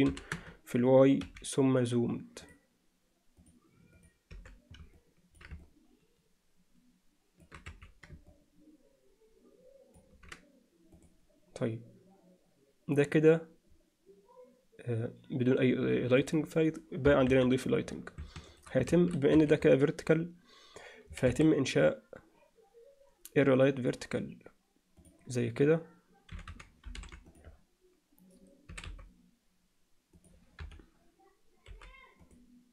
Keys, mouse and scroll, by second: 2.5 drag, 2.5 n, 3.4 click, 3.9 click, 5.0 alt+middle click, 5.7-7.5 ctrl+middle drag, 7.7 z, 8.3-10.0 ctrl+alt+middle drag, 11.3 click, 17.1 KP_0, 17.3 KP_1, 18.5 shift+right click, 18.9 shift+a, 21.3 shift+a, 26.3 r, 28.7 s, 30.6 KP_7, 31.7 g.